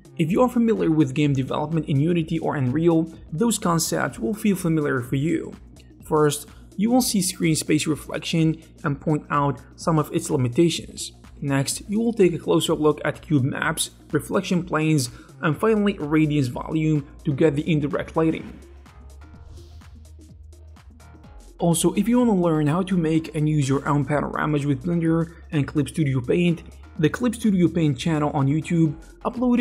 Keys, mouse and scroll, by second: 5.9 click, 6.0 g, 7.6 g, 7.9-10.2 ctrl+middle drag, 10.2 g, 11.3 g, 11.5 s, 13.0 scroll down 1, 13.3 middle click, 13.8 g.